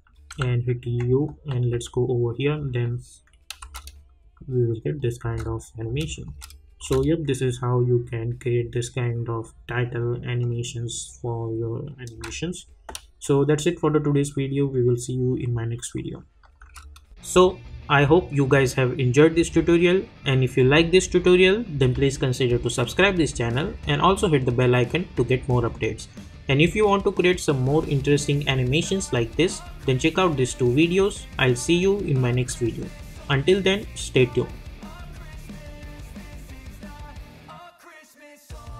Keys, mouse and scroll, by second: 0.3 u, 1.3 j, 1.7 u, 3.6 space, 16.6 space.